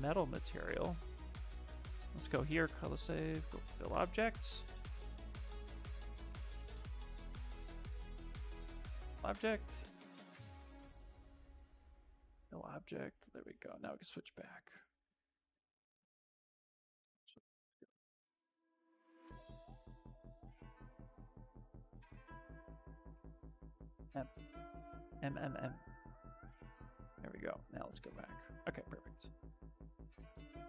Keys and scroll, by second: 10.2 shift+f, 18.9 shift+f, 19.2 shift+f, 21.8 ctrl+z, 22.6 space.